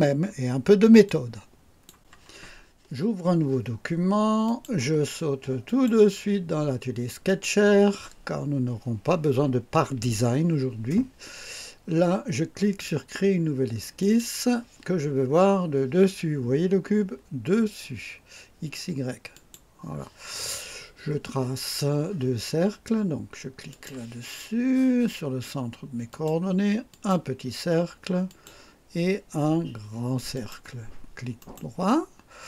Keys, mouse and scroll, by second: 1.0-2.1 drag, 4.5 click, 5.7 click, 7.3 click, 14.0 click, 19.3 click, 23.7 click, 26.1 click, 26.9 click, 28.2 click, 30.3 click, 31.4 right click.